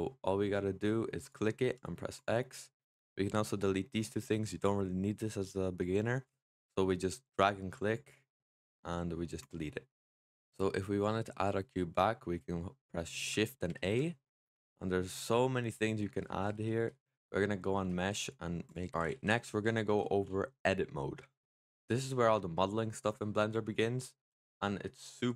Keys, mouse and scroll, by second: 1.1 click, 1.5 x, 7.0 click, 8.6 x, 10.4-12.6 scroll down 1, 13.5 shift+a.